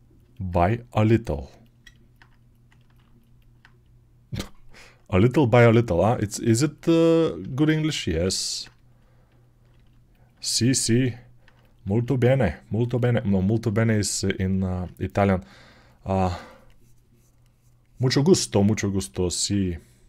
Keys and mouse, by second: 0.2-3.3 right drag, 3.3-9.7 alt+drag, 9.7-20.0 alt+right drag.